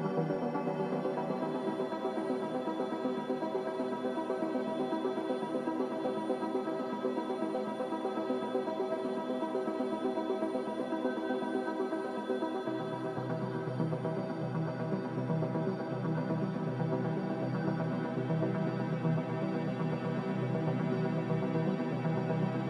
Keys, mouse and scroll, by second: 1.0 click, 1.9 m, 9.4 ctrl+b, 14.7 ctrl+b, 16.5 a, 20.0 Return.